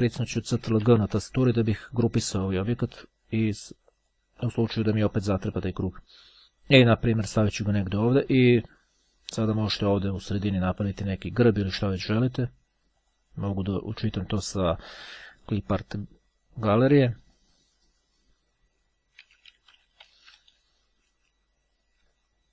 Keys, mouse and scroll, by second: 1.0 ctrl+g, 2.7 click, 3.9 click, 5.5 click, 6.4-8.7 drag, 13.1 click, 15.1-16.1 drag, 17.1 click, 17.4-18.6 typing, 20.4 d.